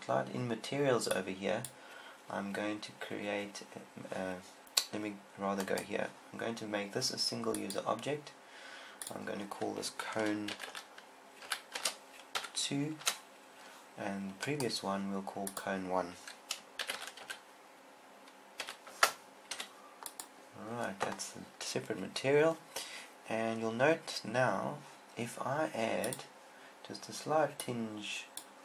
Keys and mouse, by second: 1.5 click, 5.9-8.2 right drag, 8.2 click, 12.9 click, 14.9-16.7 right drag, 26.5-28.2 drag.